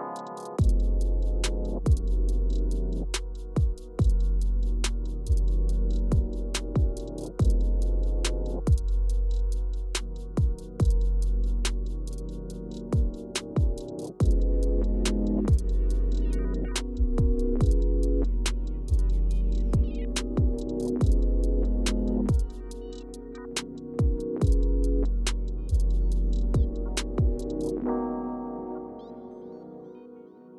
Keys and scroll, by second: 1.7 Return, 9.0 Return, 9.8 Left, 10.6 Return, 20.8 super+e, 25.2-26.3 typing.